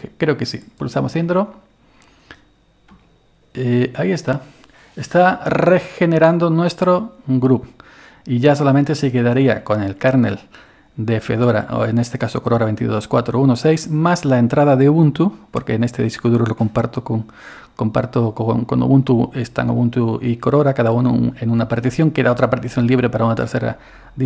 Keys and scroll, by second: 3.0 Return.